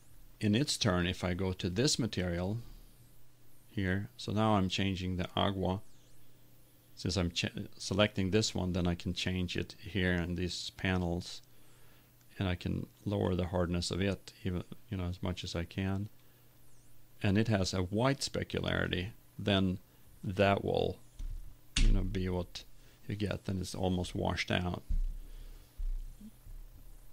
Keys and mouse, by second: 13.6-15.1 drag.